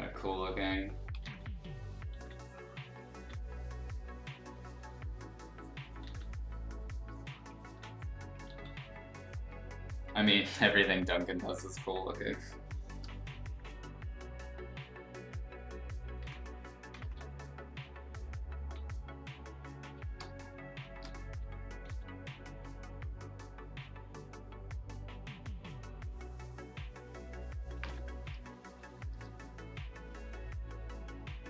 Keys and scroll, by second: 1.2 ctrl+z, 2.1 ctrl+z, 3.1 z, 6.0 ctrl+z, 7.6 ctrl+z, 8.4 ctrl+z, 12.4 space, 16.2 ctrl+z, 17.0 ctrl+z, 18.6 x, 20.2 space, 21.8 x, 27.8 ctrl+z, 28.3 space.